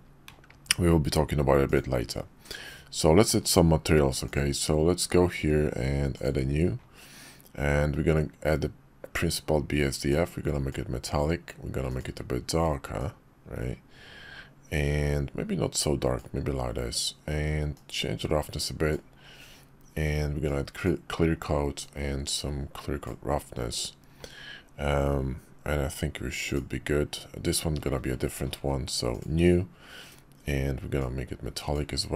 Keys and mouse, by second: 1.6 click, 4.3 click, 6.2 click, 10.2 click, 11.9 click, 17.8-18.9 drag, 20.5 click, 21.9-23.1 drag, 26.4 click, 29.1 click, 31.0 click.